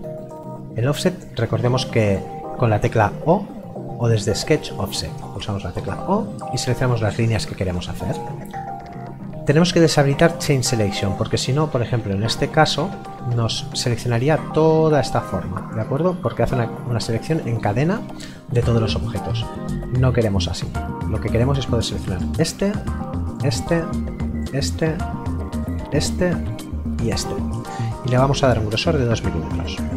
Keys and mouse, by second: 5.4 o, 20.6 click, 28.7 KP_2.